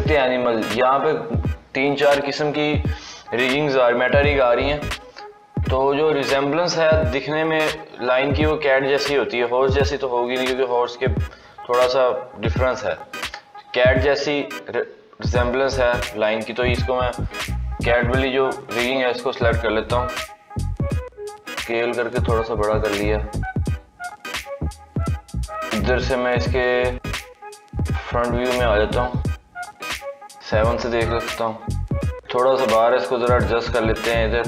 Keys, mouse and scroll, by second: 21.0 s, 25.9 click, 26.9-28.0 drag, 29.7 KP_7, 30.7-31.2 scroll up 3, 31.2-31.9 shift+middle drag, 31.9-32.3 scroll down 3, 32.3-33.5 scroll up 1, 33.5 g.